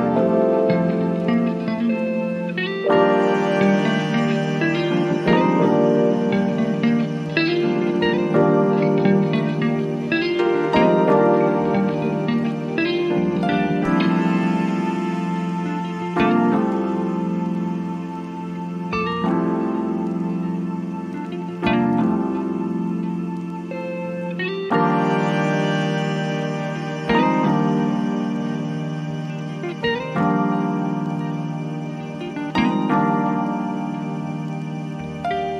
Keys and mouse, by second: 4.1-7.6 drag, 7.6-13.0 drag, 13.0-20.0 drag, 20.0-30.5 drag, 30.7 click, 34.9 click.